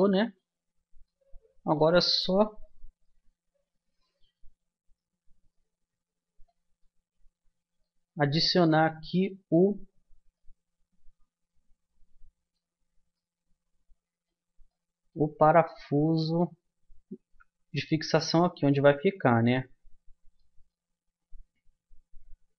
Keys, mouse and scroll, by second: 0.6-3.7 middle drag, 4.2-5.4 middle drag, 6.3-8.2 middle drag, 9.8-13.7 middle drag, 16.5-17.8 middle drag, 18.0-22.5 middle drag.